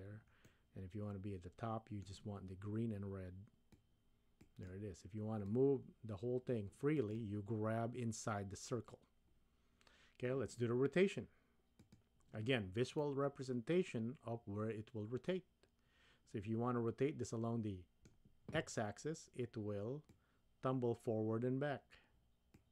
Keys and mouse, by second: 0.5-2.1 middle drag, 3.7-4.7 drag, 5.5-7.2 drag, 11.9 click, 13.0-18.1 middle drag, 20.1-22.7 drag.